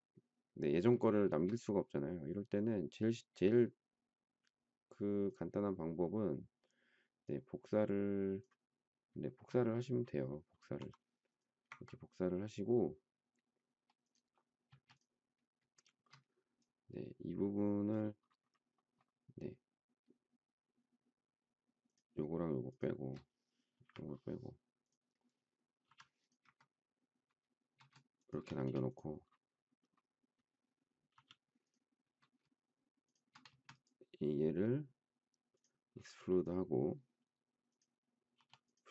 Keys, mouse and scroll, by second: 1.1 shift+middle click, 9.2 shift+middle click, 10.7 m, 14.6 space, 15.8 shift+middle click, 21.8 shift+click, 23.6 Delete, 25.8 m, 28.1 shift+click, 28.5 space, 31.1 m, 33.0 shift+click, 33.5 space, 38.3 p.